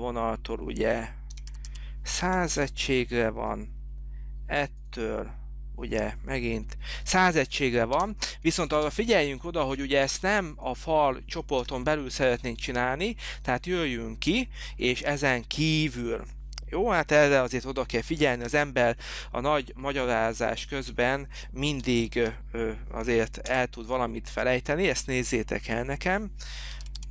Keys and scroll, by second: 1.2-2.2 typing, 2.7 Return, 8.1 Escape, 9.1 space, 11.8 Delete, 18.9 t, 21.8-22.7 typing, 23.7 Return, 26.7-27.1 typing.